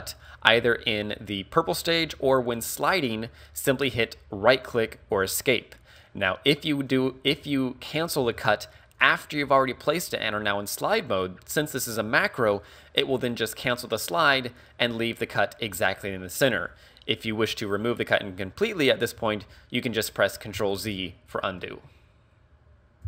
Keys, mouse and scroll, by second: 0.0 ctrl+r, 5.5 right click, 6.2-7.3 scroll up 2, 7.3 a, 8.3 ctrl+r, 14.0 right click, 20.5 ctrl+z, 21.0 shift+middle click.